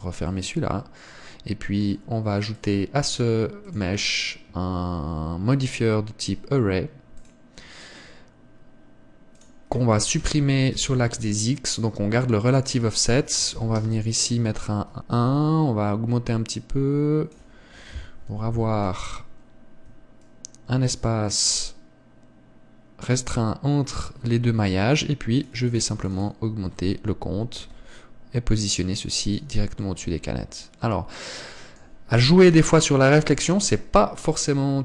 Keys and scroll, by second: 19.2 KP_7, 33.4 KP_0.